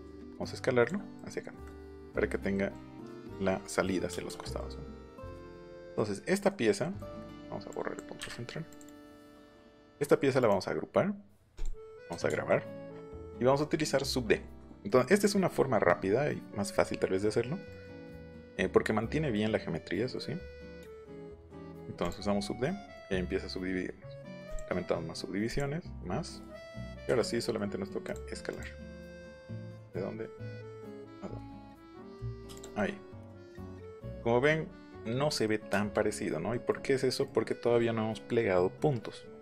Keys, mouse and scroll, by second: 4.1 space, 4.4-5.0 scroll up 4, 4.5 middle click, 5.0 click, 7.7 click, 8.3 middle click, 8.6 click, 8.9 click, 9.9 middle click, 10.3 right click, 11.5 click, 12.2 ctrl+s, 14.8 middle click, 15.5-15.8 scroll up 2, 17.7 middle click, 19.3 middle click, 20.7 middle click, 22.0 click, 22.6 middle click, 24.4 click, 25.4 click, 26.2 middle click, 27.3 middle click, 28.0 click, 28.4 click, 29.8 click, 30.8 click, 32.1 click, 32.5 click, 32.5 space, 32.7-33.7 scroll up 1, 33.7-34.1 scroll up 1, 36.8 middle click, 37.2 middle click.